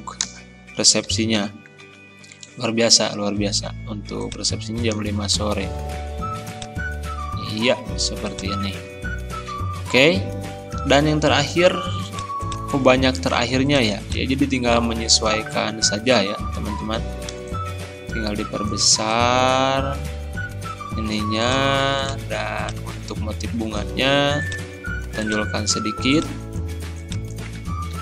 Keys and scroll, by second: 0.3 space, 1.1 ctrl+a, 1.4 ctrl+], 5.1 ctrl+z, 27.6 ctrl+z.